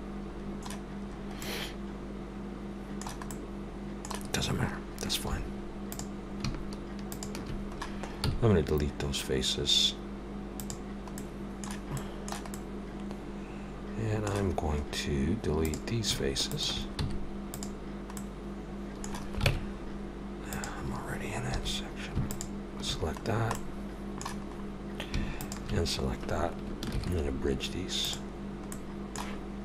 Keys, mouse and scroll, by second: 0.3 scroll up 2, 0.7 middle click, 1.0 scroll up 2, 1.4 middle click, 5.3 3, 5.9 click, 7.1 shift+click, 8.2 x, 11.2 middle click, 12.5 middle click, 14.9 scroll down 2, 15.5 scroll down 2, 15.7 click, 16.5 shift+click, 17.0 x, 18.2 middle click, 19.5 ctrl+Tab, 21.5 2, 22.2 alt+shift+click, 23.2-23.7 scroll down 3, 23.5 middle click, 24.5 scroll up 2, 25.4 alt+shift+click, 27.0 ctrl+e, 28.7 middle click.